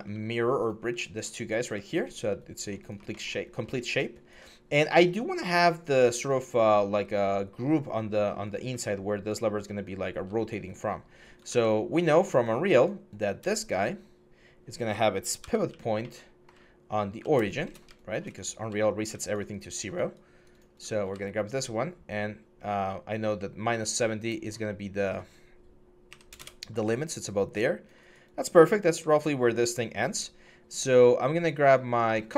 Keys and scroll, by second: 5.5 4, 6.2 6, 9.9 e, 11.3 ctrl+z, 13.7 4, 15.2-16.9 typing, 18.3 e, 18.7 6, 20.8 e, 25.9 typing, 26.2 Return.